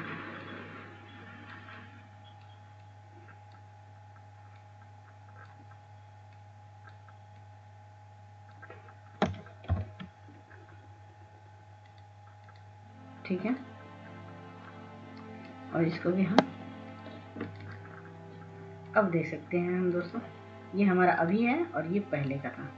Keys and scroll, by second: 12.4 ctrl+0.